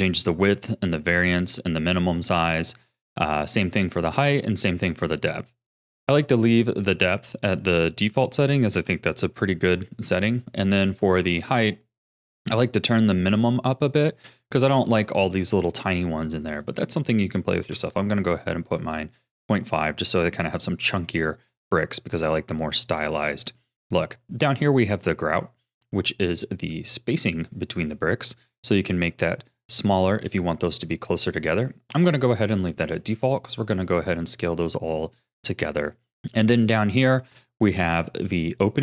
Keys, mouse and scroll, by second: 5.7-8.7 middle drag, 8.7 KP_1, 16.6-18.9 drag, 23.3-25.7 scroll down 1, 25.7-26.3 scroll up 8, 29.0-32.5 drag, 32.5-33.2 scroll down 4, 33.2-36.1 shift+middle drag, 36.1-36.6 scroll up 2, 36.6-37.7 scroll down 5, 37.7-38.8 scroll down 2.